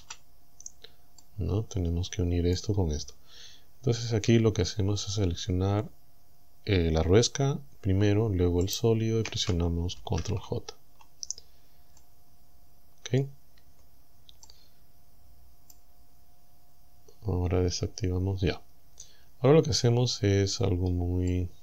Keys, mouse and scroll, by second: 0.0 z, 0.6 scroll up 1, 1.2-2.8 drag, 4.3 Tab, 8.7 shift+right click, 10.0 ctrl+j, 12.0-13.4 middle drag, 13.6 Tab, 14.5-15.9 middle drag, 16.2-16.7 scroll up 2, 20.6-20.9 scroll down 2, 21.3-21.6 middle drag.